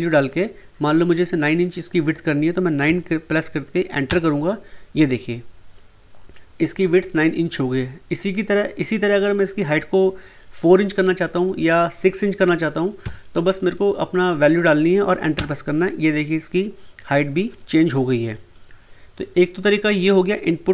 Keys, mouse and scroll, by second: 4.0 Return, 9.3 click, 15.3 Return.